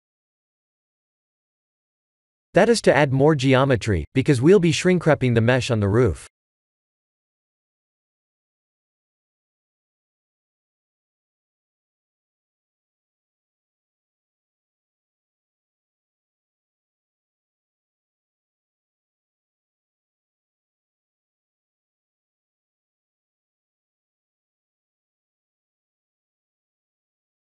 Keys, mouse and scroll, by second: 0.0-0.6 typing, 3.6 Tab, 4.2 middle click, 4.4 middle click, 4.5 middle click, 5.5-6.3 scroll down 3, 6.4 scroll down 1, 6.4 KP_1, 8.4 middle click, 12.0 middle click, 13.0 shift+d, 14.4 r, 15.7 g, 16.9 middle click, 17.1 middle click, 18.5 g, 19.6 KP_3, 20.5 KP_1, 21.9 middle click, 22.1 middle click, 22.1 middle click, 22.2 middle click, 22.6 middle click, 22.8 middle click, 24.1 s, 25.8 click.